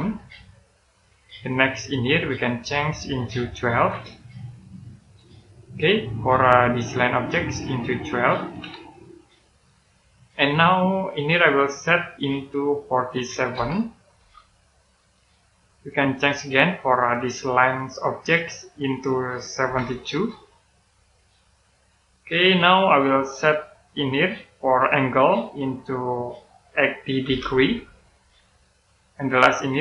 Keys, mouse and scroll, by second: 0.6 click, 3.1 click, 3.6 typing, 4.7 click, 5.3-5.8 scroll down 1, 5.8 middle click, 6.9 click, 8.2 typing, 9.4 click, 13.4-14.1 typing, 14.7 click, 20.0 typing, 21.1 click, 23.8 click, 27.2-27.5 typing, 28.4 click.